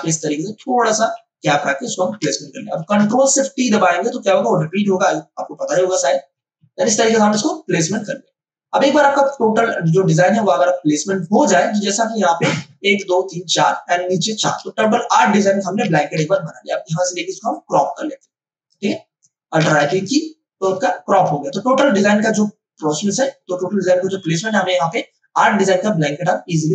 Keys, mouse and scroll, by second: 0.5 Left, 2.1 Return, 4.4 ctrl+alt+shift+t, 7.3 ctrl+space, 7.9 ctrl+alt+click, 10.1 click, 14.6 space, 14.8 click, 15.1 space, 15.8 ctrl+d, 16.1 m, 17.5-19.6 drag, 19.6 alt+i, 19.8 alt+p.